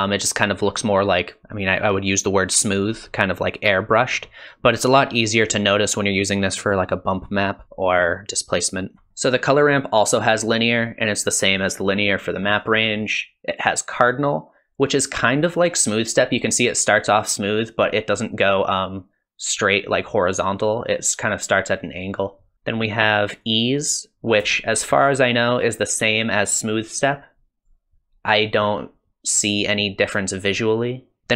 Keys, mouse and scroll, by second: 0.5-1.2 ctrl+scroll up 1, 1.2 ctrl+scroll up 1, 3.3-3.7 ctrl+scroll down 1, 3.7-4.2 ctrl+scroll up 1, 4.2-4.7 ctrl+scroll down 1, 4.7-5.3 ctrl+scroll up 1, 5.3-5.9 ctrl+scroll down 1, 5.9-6.6 ctrl+scroll up 1, 6.6-7.4 ctrl+scroll down 1, 7.4 ctrl+scroll up 1, 9.1 middle click, 9.3-11.3 scroll up 2, 12.5 click, 22.5 click, 24.5 shift+middle click, 26.1 click, 28.6 click, 30.9 click, 31.2 middle click, 31.2 click, 31.2-31.3 scroll up 1.